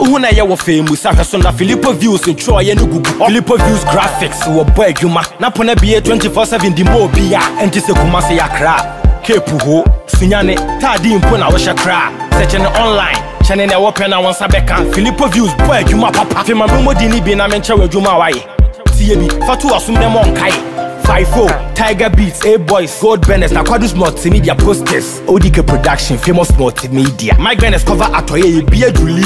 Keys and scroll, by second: 18.0 ctrl+t, 22.4 Return.